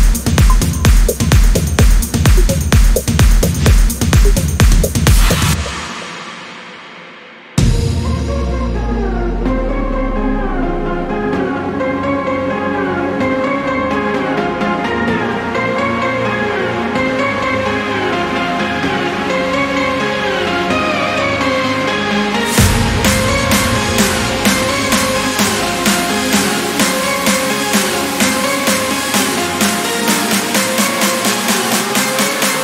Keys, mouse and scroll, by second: 0.3 click, 1.4 click, 2.2 Delete, 2.9 click, 3.3 Delete, 4.1 click, 4.5 Delete, 5.8 click, 6.3 Delete, 6.8 click, 7.2 Delete, 7.5 click, 9.5 click, 10.0 Delete, 10.8 click, 11.1 Return, 11.6 click, 12.6 ß, 14.0 0, 14.5 scroll down 2, 15.0 scroll up 2, 16.3 click, 18.2 click, 19.2 click, 20.9 click, 22.5 click, 24.0 click, 25.2 click, 26.2 scroll down 1, 26.7 scroll up 1, 27.2 click, 29.4 click, 30.8 Delete.